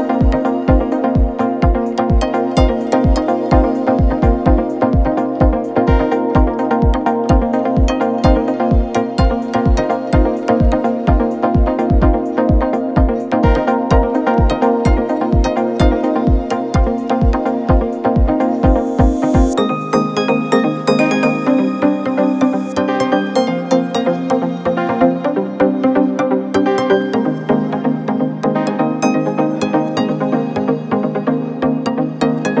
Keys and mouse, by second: 0.4 shift+click, 2.1 ctrl+a, 2.5 shift+click, 2.9-3.2 drag, 4.6-6.4 drag, 7.0-7.7 middle drag, 9.3 shift+middle click, 10.3 click, 12.0-12.5 middle drag, 14.4 Tab, 22.5 shift+click, 25.6 2, 27.5 Tab, 27.7 click, 28.3 Tab, 29.1 2, 29.4 click, 30.3 ctrl+r, 32.4 ctrl+b.